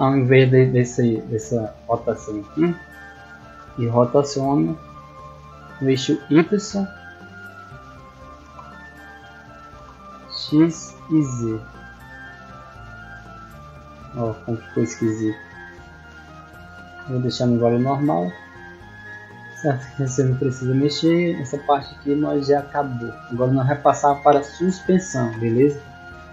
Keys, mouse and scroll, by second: 0.3 right click, 3.4 r, 6.4 right click, 10.2-12.7 typing, 17.2-17.9 scroll down 4, 18.0 middle click, 18.5 middle click, 18.9-19.2 scroll down 2, 20.5-21.0 scroll down 2, 21.3-22.7 scroll up 4.